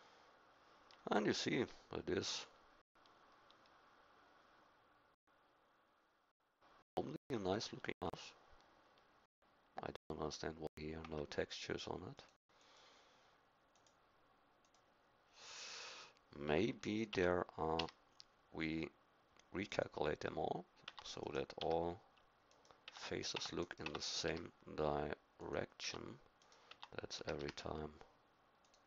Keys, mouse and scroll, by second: 11.4 Escape, 17.1 Tab, 17.8 a, 20.8 Tab, 21.6 a, 22.9 Tab, 23.3 Tab, 23.8 Tab, 24.2 a, 25.5 click, 25.8 Tab, 26.7 Tab, 27.2 a, 27.4 a, 28.6 click.